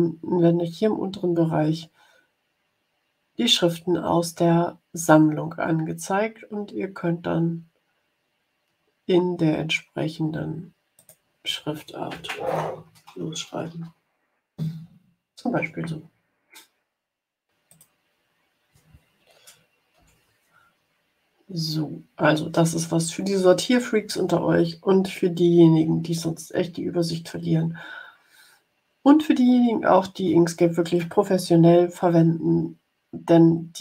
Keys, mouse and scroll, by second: 10.9 click, 12.9-13.9 typing, 17.6 click, 19.9 Delete.